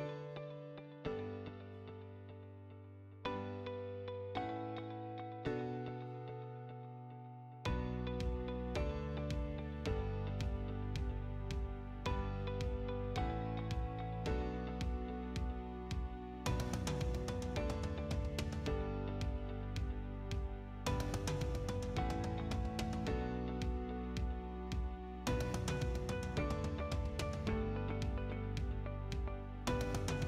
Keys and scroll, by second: 7.2-8.4 typing, 17.2 6, 18.0 Return, 24.7 2, 25.0 Return, 27.4-28.8 typing.